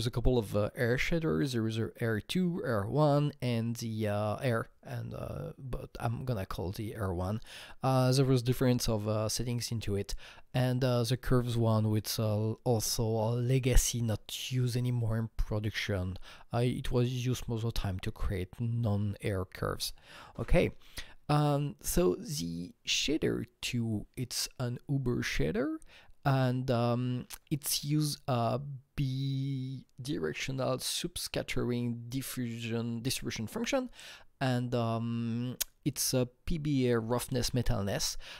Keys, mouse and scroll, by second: 21.2 Right.